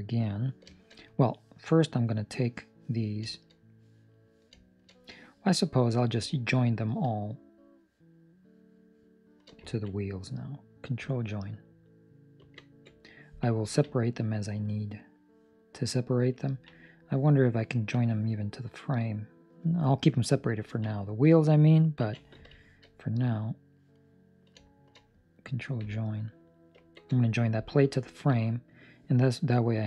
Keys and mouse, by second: 0.6 shift+middle click, 1.7 right click, 2.0 middle click, 3.4 shift+middle click, 3.5 middle click, 4.0 right click, 4.6 shift+right click, 5.9 right click, 7.6 shift+right click, 9.7 ctrl+middle click, 9.8 middle click, 12.6 ctrl+j, 13.6 ctrl+middle click, 13.8 middle click, 14.6 right click, 14.9 middle click, 16.4 ctrl+middle click, 16.7 middle click, 17.3 right click, 17.7 ctrl+middle click, 17.9 middle click, 20.6 ctrl+middle click, 20.9 middle click, 22.0 ctrl+s, 22.5 shift+middle click, 23.0 middle click, 23.5 right click, 23.9 middle click, 24.8 shift+right click, 26.7 ctrl+j, 27.3 middle click, 28.0 ctrl+middle click, 28.5 right click.